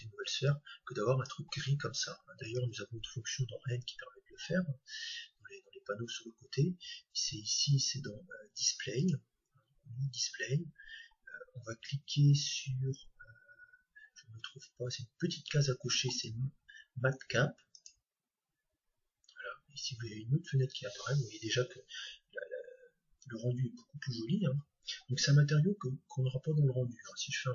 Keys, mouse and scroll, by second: 0.6-2.4 drag, 3.3-5.1 scroll down 1, 5.1-5.8 scroll down 1, 5.8-6.7 scroll down 1, 6.7-8.1 scroll down 1, 8.1 scroll down 1, 8.3-8.9 scroll up 1, 8.9-10.9 drag, 9.9-10.4 scroll down 1, 10.4-13.1 scroll down 1, 13.1-14.6 scroll up 1, 14.6-15.8 scroll down 1, 15.8-16.6 scroll down 1, 18.6-27.5 drag.